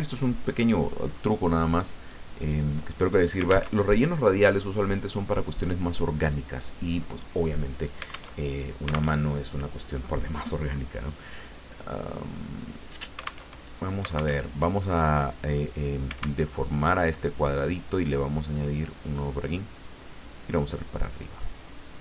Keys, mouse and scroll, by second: 2.3 click, 3.7 alt+Tab, 8.3 alt+Tab, 9.1 alt+Tab, 13.5 alt+Tab, 14.4 alt+Tab, 16.4 alt+Tab, 18.7 click, 19.5-22.0 drag.